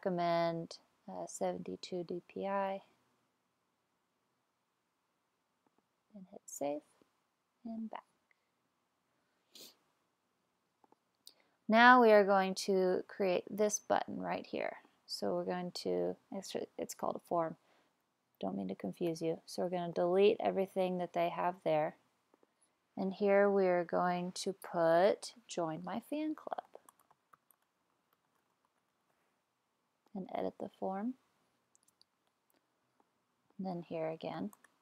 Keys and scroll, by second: 19.1 BackSpace, 25.9-29.6 typing, 33.7-34.8 typing.